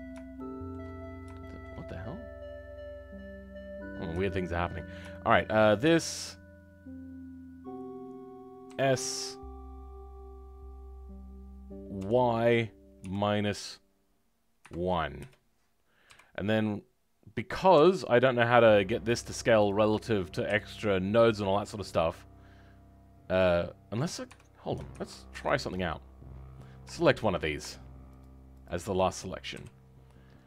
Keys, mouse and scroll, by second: 25.3 ctrl+z, 28.2 shift+click, 28.6 shift+click.